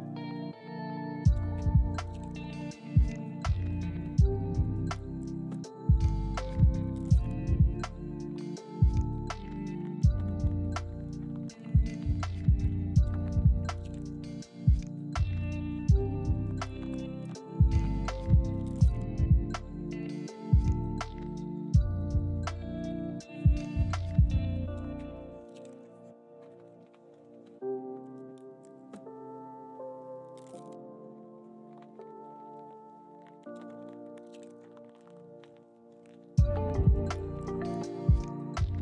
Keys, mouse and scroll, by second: 0.8 ctrl+click, 1.4 g, 2.8 ctrl+click, 11.0 double click, 12.3 Tab, 13.9 z, 15.2-15.6 scroll up 1, 19.5 double click, 21.4 g, 31.8 ctrl+click, 33.0 g, 35.0 ctrl+click, 37.5 z.